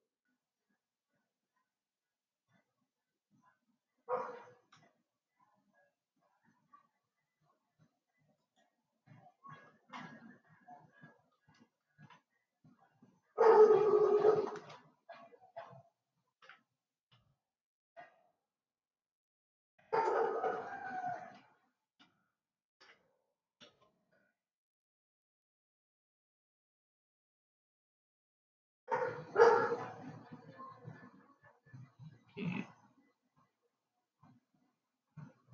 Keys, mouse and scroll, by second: 10.8-12.8 scroll up 6, 12.8-16.5 shift+middle drag, 16.9 g, 22.8 shift+d.